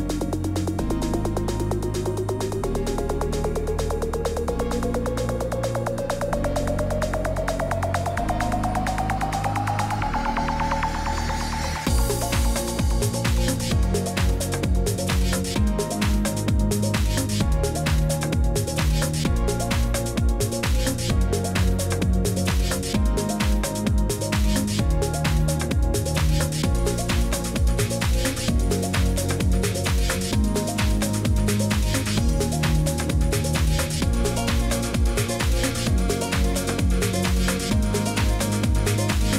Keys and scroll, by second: 35.0 ctrl+d, 35.7 BackSpace.